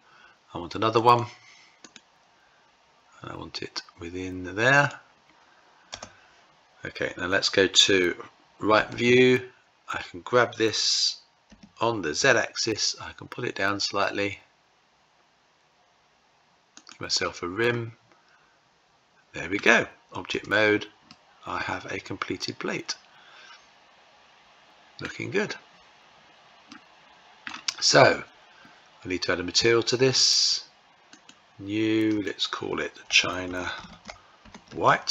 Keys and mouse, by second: 0.5-9.2 right drag, 8.5 `, 10.9 g, 17.2-19.2 middle drag, 19.8 Tab, 20.6-24.6 middle drag, 26.2-27.0 middle drag, 29.4 click, 30.7 click, 31.6-35.1 drag.